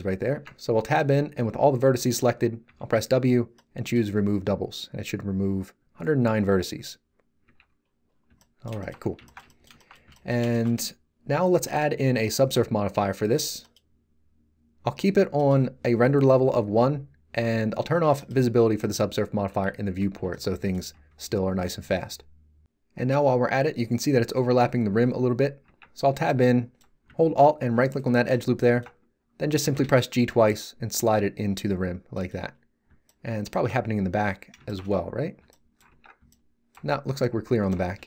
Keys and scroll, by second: 0.3 Tab, 2.6 w, 7.4 Tab, 19.5 z, 20.9 g, 25.6 Tab, 29.5 g, 35.8 Tab.